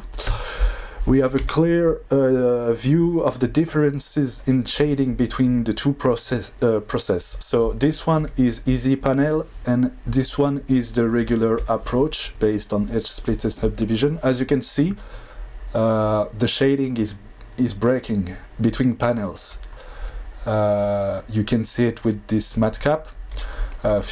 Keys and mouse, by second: 8.1 click, 11.2 click, 23.4-24.1 drag.